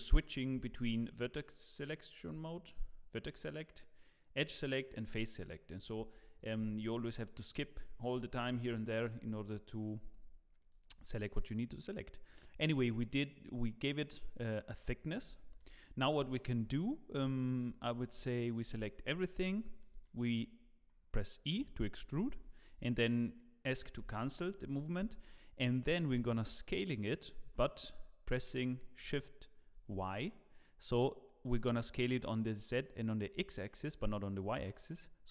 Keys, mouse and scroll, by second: 0.6 1, 9.1 scroll down 1, 9.5 shift+middle click, 10.7 click, 13.9 middle click, 14.7 middle click, 15.3 shift+middle click, 15.6 shift+middle click, 15.8-16.2 scroll up 1, 16.8 middle click, 17.3 shift+middle click, 18.6 a, 19.0 scroll up 1, 19.5 middle click, 20.0 shift+middle click, 21.5 e, 25.3 scroll down 1, 25.6 middle click, 27.4 s, 34.7 middle click.